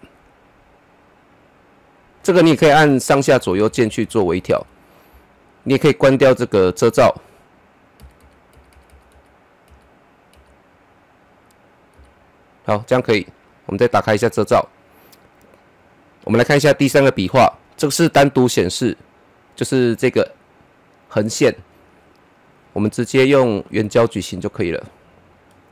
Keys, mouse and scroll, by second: 3.0 Right, 6.7 click, 7.9 Right, 13.6 click, 16.0 click, 16.9 click, 22.4 click, 22.4-25.7 drag.